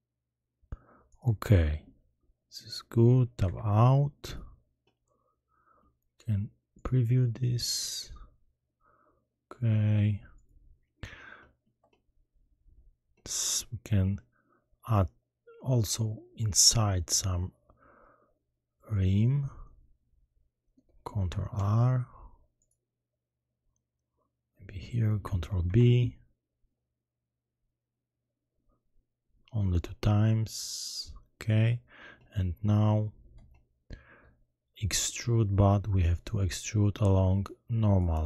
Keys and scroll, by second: 15.8 Tab, 21.5 ctrl+r, 25.6 ctrl+b.